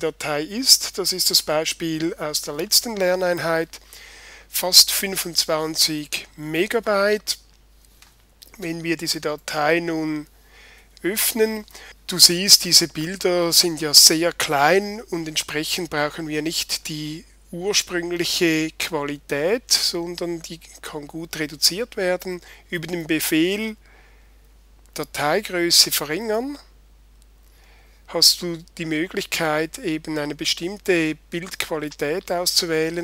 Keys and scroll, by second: 1.4 super+i.